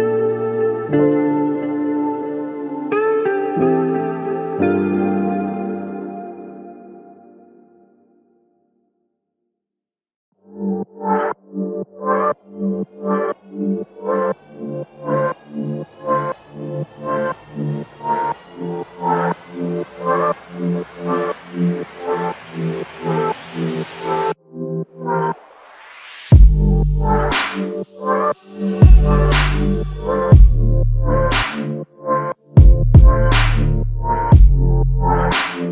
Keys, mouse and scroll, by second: 5.1 ctrl+click, 6.1 alt+click, 8.9 alt+click, 11.6 alt+click, 12.1 alt+click, 22.9 alt+click.